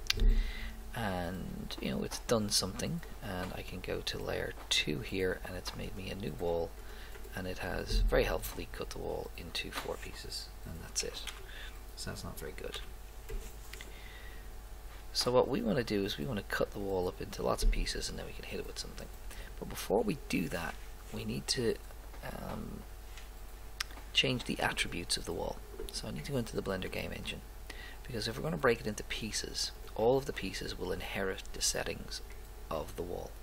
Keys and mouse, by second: 2.5 middle click, 5.9 right click, 8.4 middle click, 11.2 a, 11.4 a, 12.7 x, 15.4-16.9 drag, 24.9 right click.